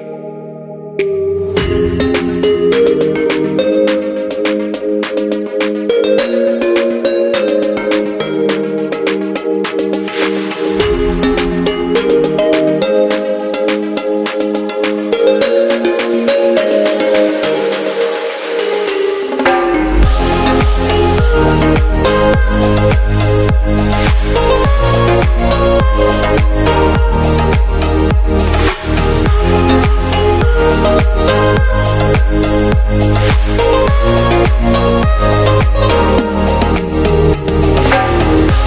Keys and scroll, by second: 29.1-30.2 typing, 30.6 Return, 36.6 super+g.